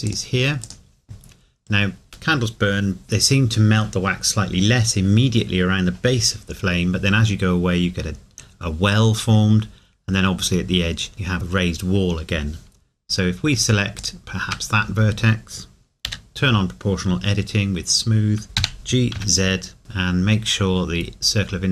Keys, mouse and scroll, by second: 0.1 click, 13.6 alt+Num_Lock, 14.0 alt+click, 18.5 g, 19.1 z, 20.0-20.7 scroll up 1.